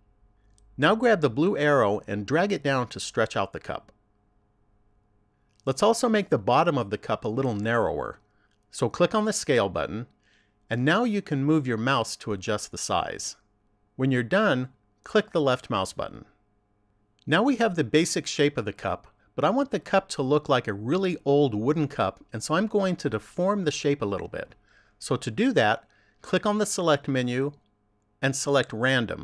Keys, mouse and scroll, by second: 2.8 click, 9.4 click, 26.7 click.